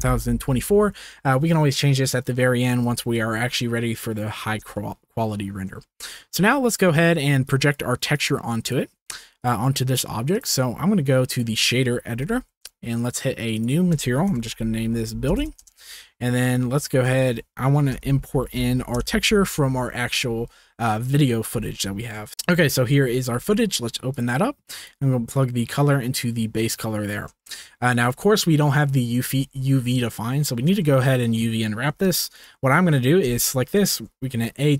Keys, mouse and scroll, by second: 2.9 ctrl+s, 4.8-5.2 shift+middle drag, 5.8 shift+middle drag, 6.0-7.5 shift+middle drag, 7.5 click, 7.7 middle click, 8.1 click, 8.4 middle click, 8.5 click, 8.7 middle click, 9.3 click, 9.4 middle click, 10.3-12.1 drag, 12.1 n, 12.9 click, 13.5-15.6 drag, 16.4 click, 16.7 shift+middle click, 16.9 shift+a, 22.2 shift+click, 24.8 drag, 25.4-26.1 drag, 26.5 click, 27.4 shift+middle click, 30.8-31.2 shift+drag, 32.3 click, 33.3 Tab, 34.1 a.